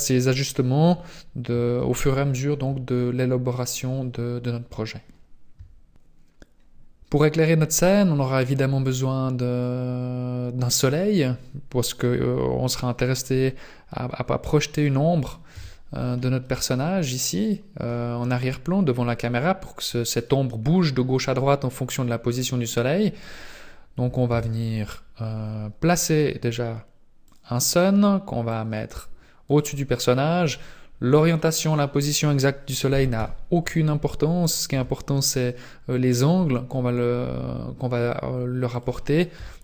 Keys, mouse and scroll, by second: 1.7 shift+space, 9.6 click, 13.2 middle click, 14.0-14.4 scroll down 4, 14.7 right click, 15.5 KP_Decimal, 16.4 middle click, 18.0 scroll down 2, 19.2 scroll down 2, 19.9 middle click, 21.7-22.5 scroll down 6, 22.7 scroll up 2, 24.3 shift+a, 28.5 click, 33.1 KP_3, 34.7 r, 39.3 KP_7.